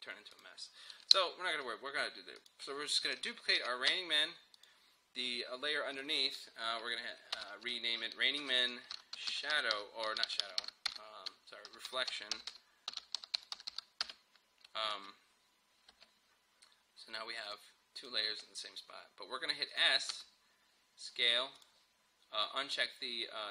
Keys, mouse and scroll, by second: 0.4 click, 1.0 Delete, 2.4 click, 3.6 ctrl+d, 4.6 click, 7.4 Return, 7.6 Right, 8.4-10.3 typing, 11.5-15.0 typing, 17.5 click, 20.2 s, 21.6 click.